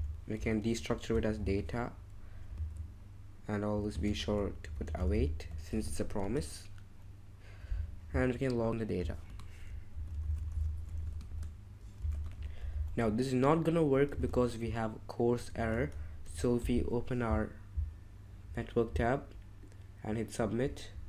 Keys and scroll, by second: 0.0-2.5 typing, 3.7-6.2 typing, 5.9 Escape, 9.0-12.8 typing, 14.2 super+Tab, 15.6 ctrl+Tab, 16.2 alt+super+i.